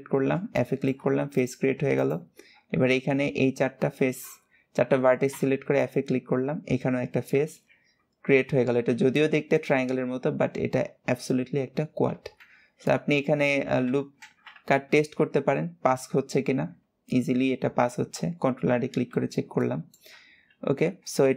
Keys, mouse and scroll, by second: 0.3 shift+middle click, 1.1 click, 1.7 alt+shift+click, 5.2 f, 7.4 KP_7, 12.7 middle click, 13.4 alt+z, 14.0 alt+z, 14.7 ctrl+r, 19.0-19.4 scroll down 2, 19.4 middle click, 20.0-20.4 scroll down 1, 20.8 alt+z.